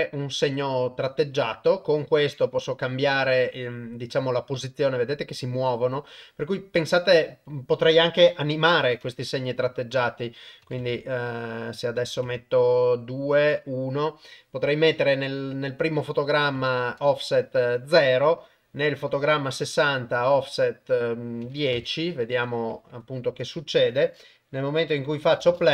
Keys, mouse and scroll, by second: 0.6 click, 2.9 click, 3.2 click, 3.4 click, 4.8 click, 5.0 click, 5.2 click, 5.4 click, 5.6 click, 5.8 click, 6.8 click, 7.0 click, 7.1 click, 7.3 click, 8.5 shift+Left, 10.0 click, 12.0 click, 16.1 click, 19.1 click, 20.2-21.8 drag, 23.8-25.1 drag, 25.4 shift+space.